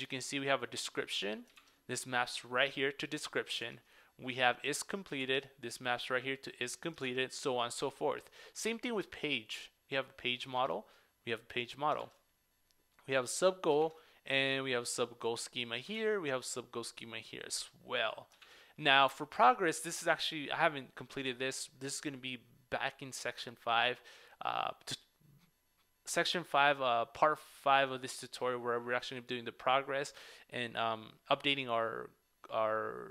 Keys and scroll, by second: 3.7 super+Tab, 5.2 super+Tab, 10.6 super+Tab, 13.8 super+Tab.